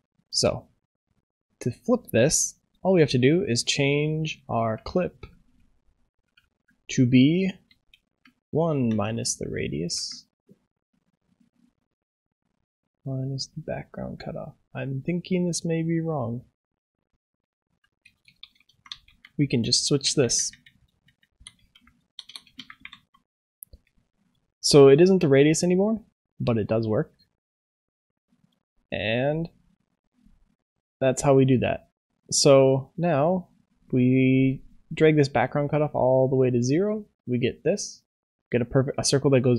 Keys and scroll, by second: 9.0 ctrl+s.